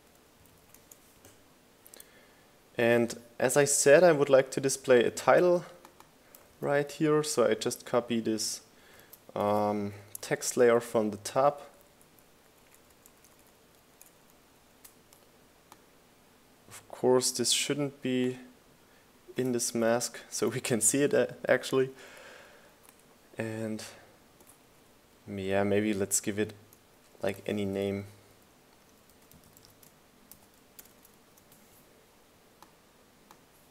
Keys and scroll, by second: 2.2 m, 2.5 Return, 9.3 super+c, 10.8 super+v, 11.6 shift+Down, 11.7 shift+Left, 12.4 shift+Left, 12.6 shift+Down, 13.4 shift+Right, 13.5 shift+Down, 14.3 shift+Right, 14.4 shift+Down, 15.0 shift+Left, 15.1 shift+Down, 21.8 shift+Right, 22.0 shift+Up, 22.5 shift+Left, 22.7 shift+Up, 23.2 Left, 23.5 Up, 23.8 Left, 24.5 Right, 24.7 Up, 26.6 Down, 27.5 Down, 30.8-32.8 typing.